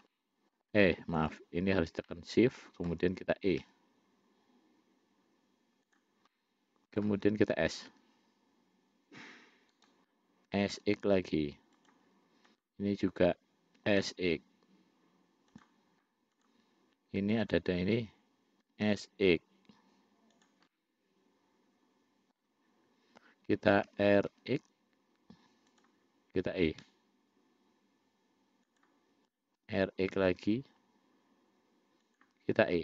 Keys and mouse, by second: 0.4 middle click, 1.4 shift+click, 2.3 middle click, 3.9 e, 6.6 middle click, 8.2 s, 10.8 s, 12.8 click, 14.0 s, 16.6 click, 17.7 shift+click, 18.9 5, 21.0-22.7 middle drag, 24.1 r, 27.1 e, 29.8 r.